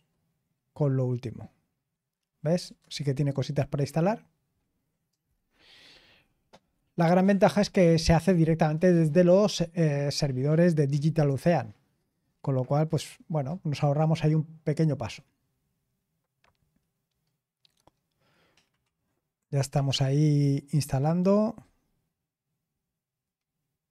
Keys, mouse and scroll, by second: 2.5 Return.